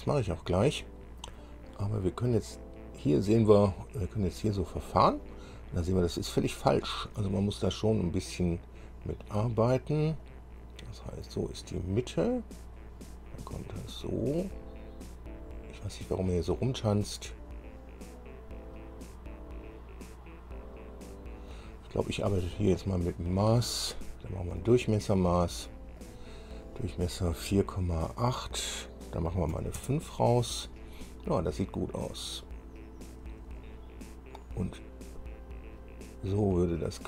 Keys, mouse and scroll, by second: 0.5-0.8 scroll down 2, 1.4-4.8 drag, 5.6 scroll up 2, 7.3-8.9 drag, 10.4-11.7 drag, 12.8-16.7 drag, 18.4-21.9 drag, 22.6 click, 24.8 click, 26.2 click, 29.7 KP_5, 30.0 KP_Enter, 33.8-37.0 drag.